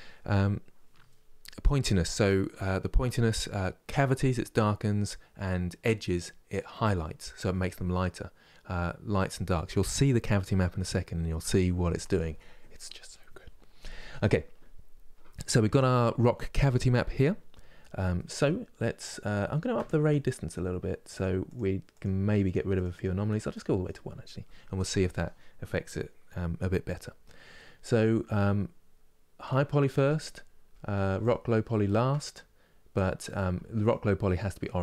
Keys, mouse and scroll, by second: 17.8-20.9 middle drag, 20.9-29.2 drag, 33.5 ctrl+click.